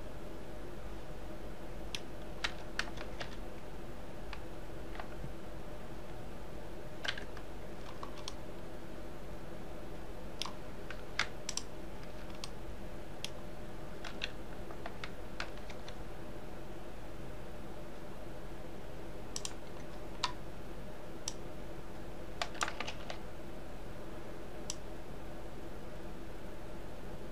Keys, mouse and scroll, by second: 2.5 s, 8.4-11.5 middle drag, 11.6 shift+click, 12.6-14.2 middle drag, 14.2 s, 21.4 click, 23.0 alt+z, 24.8 click.